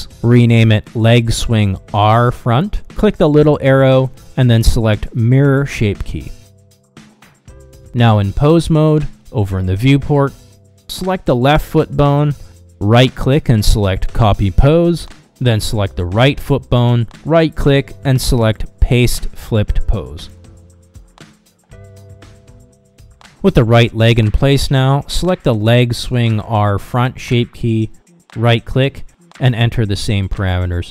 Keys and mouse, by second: 2.1 BackSpace, 2.2 BackSpace, 4.1-5.3 drag, 10.1 ctrl+Tab, 12.0 click, 13.8-14.9 drag, 16.1 click, 16.4-16.9 middle drag, 17.8-18.7 right drag, 19.1-22.4 middle drag, 23.0 click, 27.4-28.4 drag, 28.7-29.6 middle drag, 30.4-30.9 right drag.